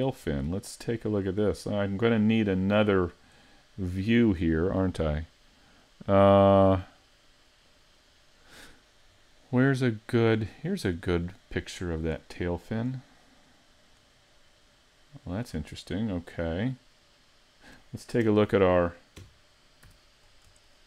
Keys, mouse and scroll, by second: 1.3 middle click, 1.8-2.3 scroll down 2, 2.3 middle click, 4.4 click, 12.0 click, 12.9-13.6 scroll up 5, 13.6 middle click, 14.2-14.7 scroll up 1, 14.7 middle click, 15.8 shift+middle click, 18.2 KP_3, 19.2 KP_5, 19.9 z, 20.3-20.7 scroll up 4, 20.7 shift+middle click.